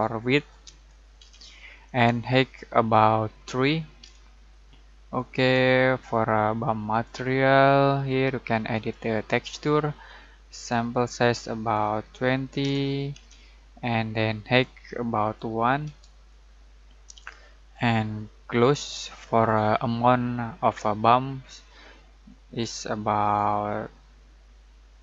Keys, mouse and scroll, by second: 0.5-1.1 typing, 1.8-3.1 drag, 4.0 3, 5.1-11.9 drag, 12.6-13.1 typing, 14.6-15.5 click, 15.8 typing, 17.0-22.9 drag.